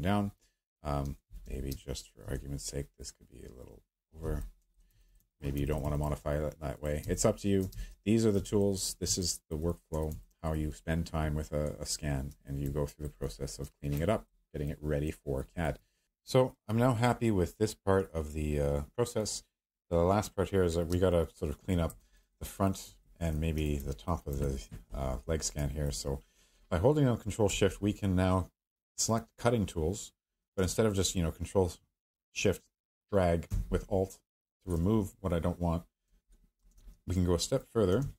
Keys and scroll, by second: 0.8-2.2 typing, 7.0-8.2 typing, 20.9-21.7 space, 36.7 ctrl+shift+z, 38.0 ctrl+z.